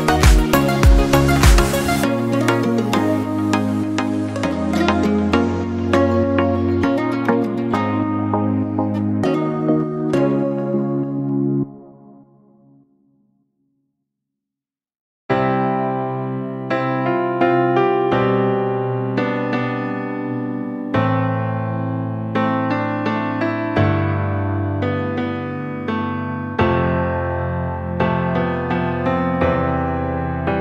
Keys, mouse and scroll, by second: 0.4 Tab, 0.8-1.7 scroll down 2, 1.7 click, 2.6 alt+z, 2.9-3.6 scroll down 7, 3.6-4.4 middle drag, 4.4-5.3 scroll up 7, 5.3-6.7 middle drag, 6.7 KP_1, 7.5-7.9 middle drag, 7.9 scroll up 3, 8.2-8.9 shift+middle drag, 8.9 scroll up 2, 9.3 Tab, 10.5 ctrl+r, 12.6 ctrl+z, 15.2 KP_Decimal, 16.1-16.4 scroll up 1, 16.4-17.7 shift+middle drag, 17.7 ctrl+r, 19.6 ctrl+r, 21.2 Tab, 21.6 scroll down 4, 21.8-23.5 middle drag, 23.5-24.3 scroll up 4, 24.3 scroll up 1, 24.6 Tab, 26.2-28.5 middle drag, 28.5-29.4 scroll down 2, 29.4 ctrl+r.